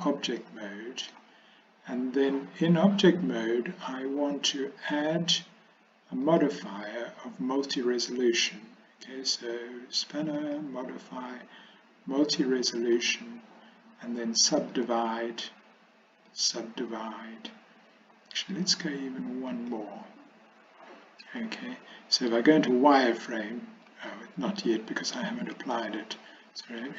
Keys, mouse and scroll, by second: 0.5 middle click, 10.5-13.2 drag, 14.9 click, 16.5 click, 19.6 click, 22.4 z, 23.9 z, 24.8 z.